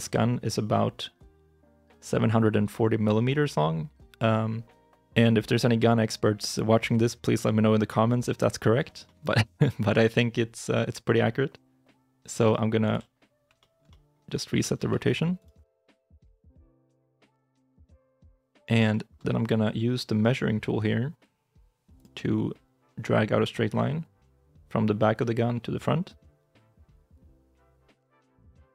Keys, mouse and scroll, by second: 8.9 shift+i, 9.0 shift+middle click, 12.7 alt+r, 13.5 shift+middle click, 13.7 shift+middle click, 14.4 g, 14.6 x, 16.0 KP_3, 16.7 KP_9, 17.9 g, 18.8 shift+middle click, 19.1 scroll up 1.